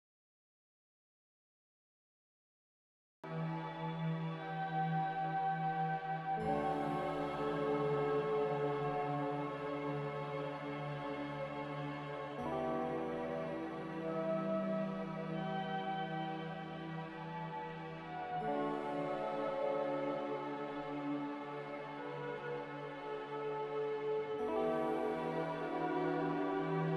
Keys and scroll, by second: 3.5 x, 5.2-6.2 typing, 9.0-9.8 typing, 14.4 F9, 15.1 g, 18.0 z, 26.1-26.9 typing.